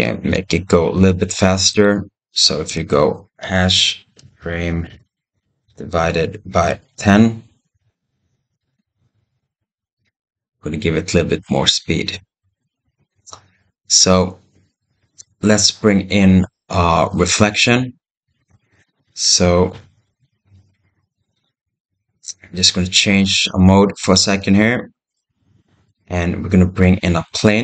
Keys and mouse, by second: 0.2 ctrl+z, 1.5-3.3 drag, 3.6-4.7 drag, 6.0-7.6 drag, 8.5 space, 18.3 space, 19.6 shift+Left, 20.0 space, 23.9 click, 24.9-25.7 middle drag, 27.1 shift+a.